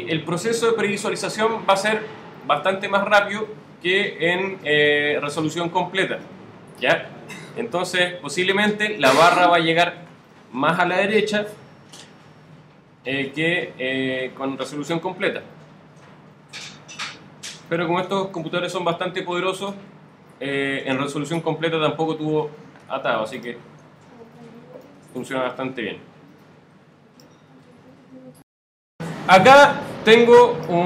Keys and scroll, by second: 23.1 alt+z.